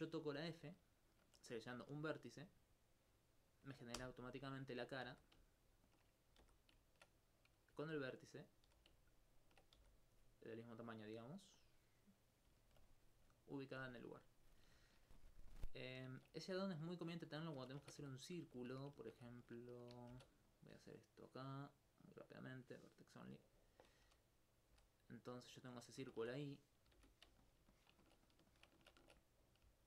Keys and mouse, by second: 0.4 alt+right click, 4.0 f, 5.9 ctrl+click, 6.4 ctrl+g, 7.9 alt+click, 8.5 right click, 8.7 g, 9.4 ctrl+click, 9.8 ctrl+g, 10.8 click, 11.1 right click, 11.6 click, 12.3 right click, 12.9 click, 13.8 right click, 14.2 click, 14.7 alt+click, 18.3 right click, 20.1 ctrl+b, 20.5 click, 21.2 middle click, 21.7 middle click, 22.1 click, 23.3 s, 23.9 click, 24.1 click, 24.7 right click, 25.8 click, 26.1 ctrl+Tab, 27.0 shift+space, 27.5 alt+click, 27.6 alt+click, 28.3 alt+s, 29.5 click.